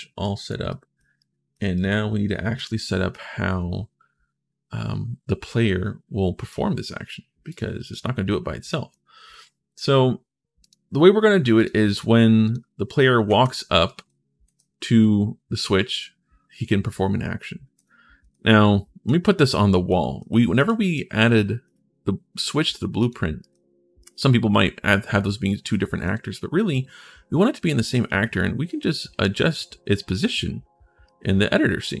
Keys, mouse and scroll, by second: 0.0 right click, 0.4 right click, 1.0 right click, 1.5 right click, 2.9-6.3 right drag, 7.2 click, 7.6 click, 8.5 right click, 9.7 middle click, 10.4 click, 11.3 click, 12.7 right click, 13.1 ctrl+shift+s, 13.6 right click, 13.8 s, 14.3 w, 17.5-19.9 typing, 17.7-19.0 right drag, 20.7 middle click, 22.8 right click, 23.2-25.8 right drag, 23.3 s, 25.1 d, 30.8-32.0 right drag.